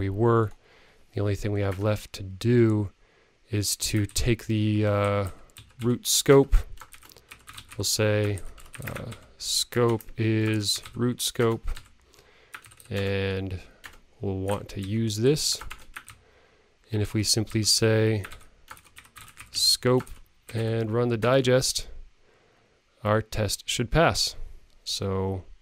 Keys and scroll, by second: 5.8 super+-, 8.7 super+Left, 9.0 super+Right, 13.2 alt+Return, 14.7 alt+shift+Up, 19.8 super+-.